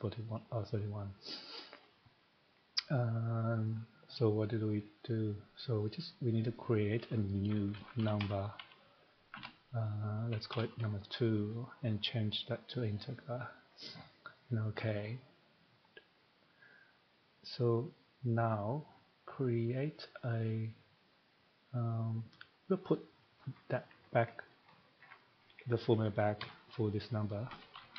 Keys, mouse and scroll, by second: 1.6 click, 4.8 click, 6.0 click, 7.7 n, 8.0 o, 8.2 ., 9.3 BackSpace, 14.2 click, 14.4 click, 18.9 click, 22.9 click, 24.5 ctrl+v, 25.3 click, 26.4 l, 27.5-27.9 typing.